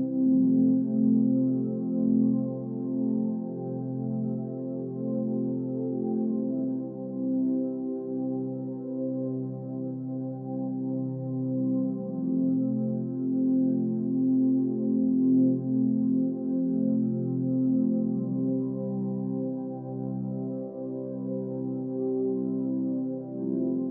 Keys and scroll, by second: 3.0 ctrl+z, 10.4 ctrl+z, 13.3 Left, 14.1 Down, 14.3 Left, 14.4 Down, 15.8 Right, 17.8 ctrl+=.